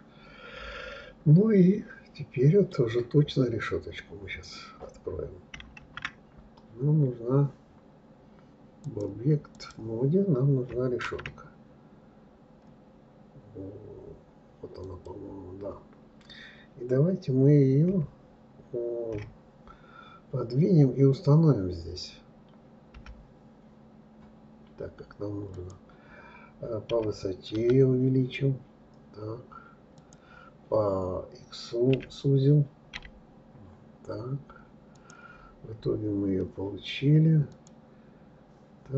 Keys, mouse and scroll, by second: 2.8-4.0 scroll down 1, 4.0-4.7 scroll up 2, 4.7-5.8 scroll up 1, 5.8 shift+a, 8.8-11.0 drag, 11.0 shift+a, 17.8 KP_3, 37.5 click.